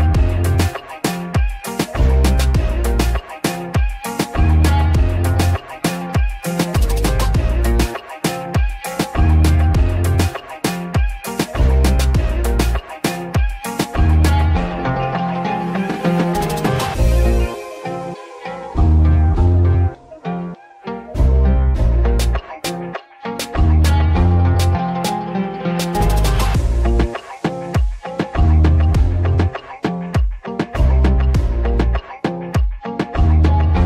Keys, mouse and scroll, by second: 2.9 scroll down 1, 3.2-5.5 scroll up 1, 5.5 s, 6.8 middle click, 7.3 Tab, 8.5 ctrl+r, 17.0-17.4 scroll up 2, 17.4 shift+middle click, 18.0-20.2 scroll up 2, 18.1 shift+middle click, 20.2 ctrl+b, 22.0-22.8 scroll down 2, 22.8 shift+middle click, 23.1-23.8 scroll up 1, 23.8 ctrl+b, 32.9 click.